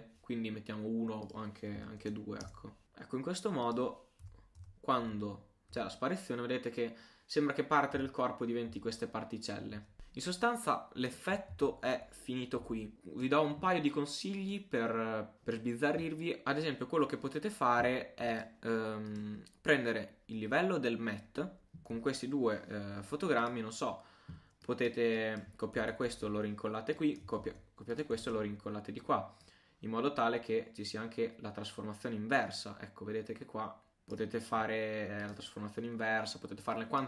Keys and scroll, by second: 11.5 super+a, 12.6 super+u, 25.8 super+c, 27.4 super+c.